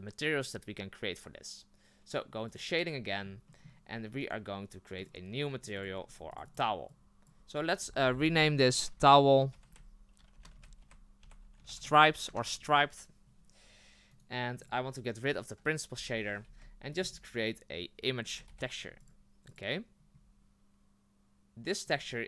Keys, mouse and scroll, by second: 2.5 click, 3.9 scroll up 2, 4.2 right click, 5.1 drag, 14.6 click, 16.0 Delete, 22.1 click.